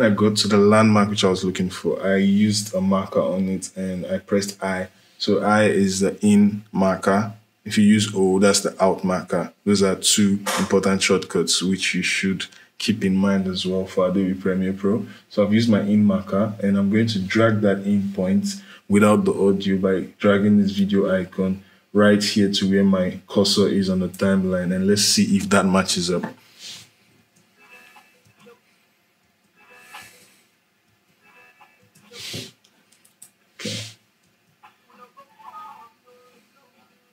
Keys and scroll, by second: 26.9 space, 34.0 space.